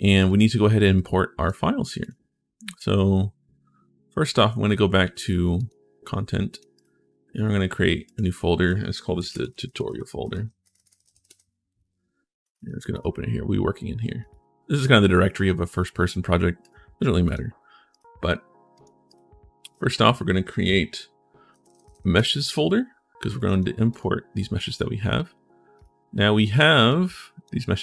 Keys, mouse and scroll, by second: 0.0 click, 0.7 right click, 1.8 click, 5.3 click, 6.3 click, 6.5 right click, 7.8 click, 8.8-10.8 typing, 17.7 right click, 18.9 right click, 19.5 click, 21.3-22.2 typing, 23.1 click, 23.7 click, 25.5 click, 26.3 click, 26.9 click, 27.5 click.